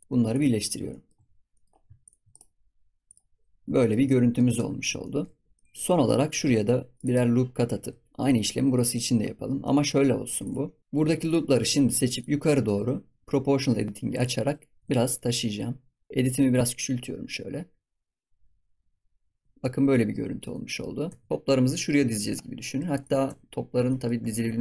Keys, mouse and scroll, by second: 0.2 click, 0.5 middle click, 1.2 scroll up 2, 1.5 middle click, 1.9 shift+click, 2.3-3.3 right drag, 3.3 scroll down 5, 3.5 Tab, 3.6 scroll up 2, 3.7 shift+middle click, 4.5 Tab, 4.7-5.0 scroll up 1, 5.0 shift+middle click, 5.5 scroll up 1, 5.5 middle click, 6.3 ctrl+r, 8.1 click, 9.6 middle click, 10.3 click, 11.2 alt+shift+click, 12.1 alt+shift+click, 14.1 click, 19.4 scroll down 4, 19.6-20.4 middle drag, 20.4 ctrl+s, 20.6 middle drag, 20.9 scroll up 4, 21.0 Tab, 21.3-22.0 scroll down 2, 22.0 middle drag, 22.3 scroll up 3, 22.6 middle click, 23.0 click, 23.2 Tab, 23.8 middle click, 24.3 ctrl+r.